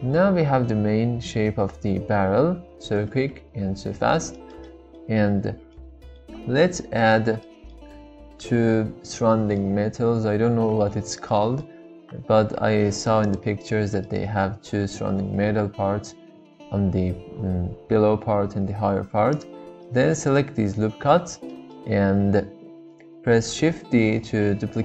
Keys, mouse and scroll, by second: 4.4-5.3 shift+middle drag, 5.3 Tab, 5.7 middle click, 7.5 shift+middle click, 9.2-10.4 middle drag, 11.3 middle click, 12.2 3, 14.0-15.2 middle drag, 19.3 alt+shift+click, 19.9 middle click, 21.5 middle click, 23.7 shift+d.